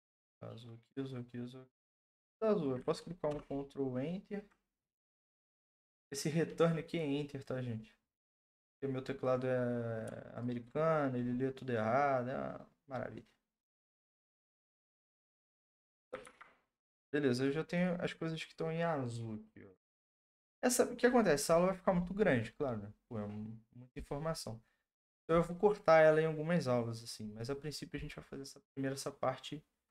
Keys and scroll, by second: 3.3 ctrl+Return, 16.2 ctrl+d.